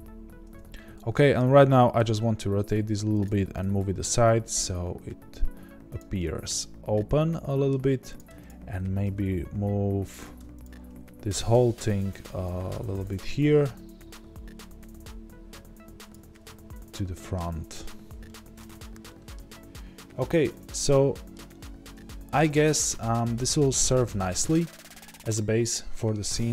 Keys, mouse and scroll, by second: 0.0-0.4 scroll down 2, 0.4 Tab, 1.9 r, 8.1 click, 9.0 g, 10.6 shift+click, 11.3 g, 16.3-26.5 middle drag, 17.7 scroll down 1, 21.6-22.0 scroll up 2.